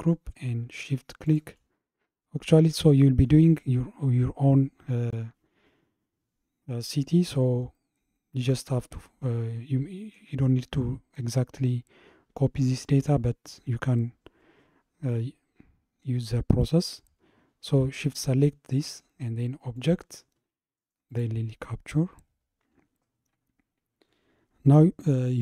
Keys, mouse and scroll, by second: 1.3 shift+click, 8.7-11.9 middle drag, 19.8-22.9 drag.